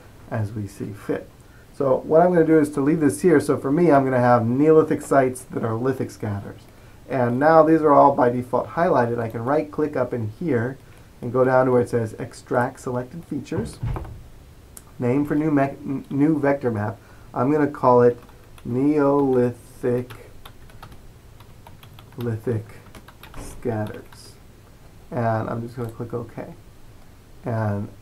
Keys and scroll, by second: 18.0-24.0 typing.